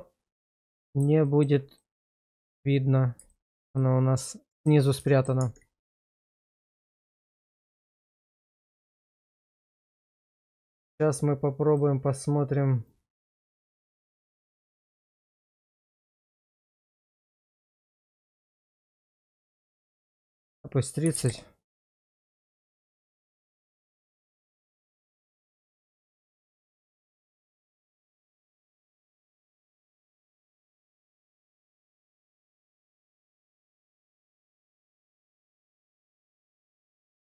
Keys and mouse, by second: 1.2 shift+middle click, 1.8 middle click, 2.3 shift+middle click, 3.3 shift+middle click, 3.8 middle click, 5.1 shift+middle click, 5.4 Tab, 6.1-7.7 middle drag, 8.2 shift+middle click, 9.1 shift+middle click, 11.7 click, 12.9-19.3 drag, 19.7-21.3 drag, 22.8 Tab, 24.0 Tab, 24.9-25.8 middle drag, 26.2 shift+middle click, 27.0 shift+middle drag, 27.4-28.2 middle drag, 28.6 shift+middle drag, 29.6 shift+middle drag, 30.7-32.5 middle drag, 32.7 shift+middle drag, 33.1-35.0 middle drag, 35.2 shift+middle drag, 35.6-36.9 middle drag.